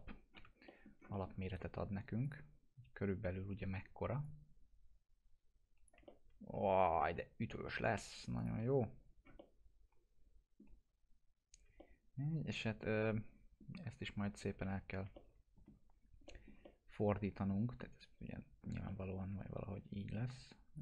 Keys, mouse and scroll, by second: 0.1 scroll down 1, 0.4 p, 0.7 middle click, 0.9 scroll down 1, 1.2 alt+middle click, 1.5 right click, 2.3 click, 2.7 scroll up 1, 4.3-7.7 drag, 6.1-8.4 alt+middle drag, 8.4 click, 9.2 scroll down 1, 9.7-10.7 alt+middle drag, 11.8-13.7 alt+middle drag, 14.7 F4, 15.2-15.8 alt+middle click, 15.9 scroll down 1, 16.3 middle click, 16.7-18.9 alt+middle drag, 19.3 e, 20.0-20.8 click.